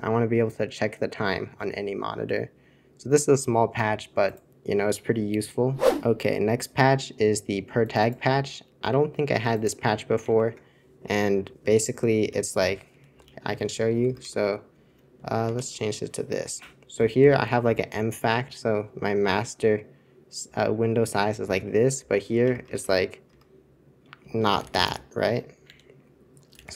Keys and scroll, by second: 10.3 super+1, 12.1 super+c, 12.6 y, 12.9 super+c, 13.1 super+y, 13.5 super+c, 14.0 super+Return, 14.2 super+Return, 14.4 super+Return, 15.4 alt+super+1, 16.9 super+l, 17.1 super+l, 17.4 super+l, 22.1 super+3, 22.4 super+Return, 22.6 super+Return, 22.8 super+Return, 23.2 super+Return, 24.5 super+h, 24.7 super+h, 24.8 super+h, 25.1 super+1, 25.6 super+3, 26.5 super+c, 26.7 super+c.